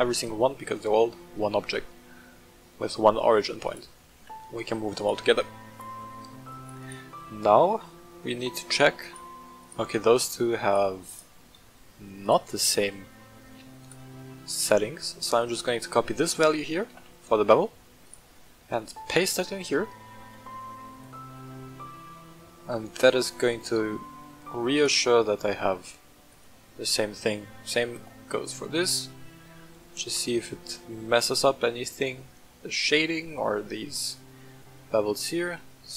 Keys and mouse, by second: 0.0-1.1 middle drag, 2.0 s, 3.6 right click, 4.1 g, 4.9 right click, 5.7-6.1 middle drag, 6.8 right click, 9.0 right click, 9.6 right click, 10.1 right click, 10.6 right click, 11.0 right click, 12.2-12.6 right drag, 12.7 shift+middle drag, 13.8 right click, 14.6 right click, 16.0 ctrl+c, 16.8 ctrl+c, 17.0 ctrl+c, 18.0 right click, 18.4-18.8 shift+middle drag, 21.0 ctrl+v, 24.2 shift+middle drag, 24.7 click, 26.2 click, 27.9 ctrl+v, 29.2 shift+drag, 30.0 click, 30.5 shift+drag, 31.4-33.5 drag, 34.5-35.9 middle drag.